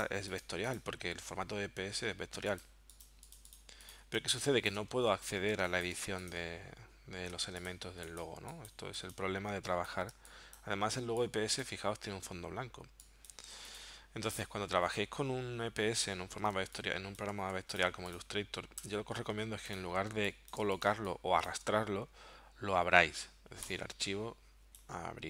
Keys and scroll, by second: 4.2 space, 5.6 space, 6.1 v, 7.4 a, 10.2 space, 16.6 space, 17.6 v, 18.8 BackSpace, 19.3 z, 20.1 space, 20.9 space.